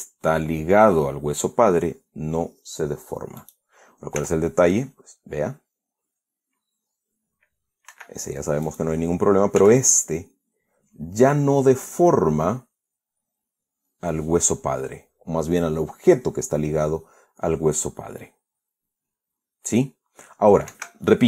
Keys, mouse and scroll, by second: 4.0 right click, 4.8 r, 8.6 Escape, 9.3 right click, 10.2 r.